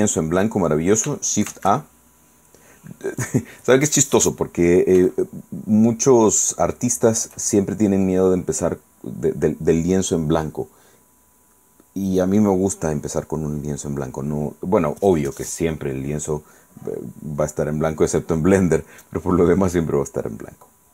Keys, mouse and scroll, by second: 1.6 shift+a, 3.3 click, 5.2-7.5 shift+middle drag, 20.6-20.9 scroll up 2.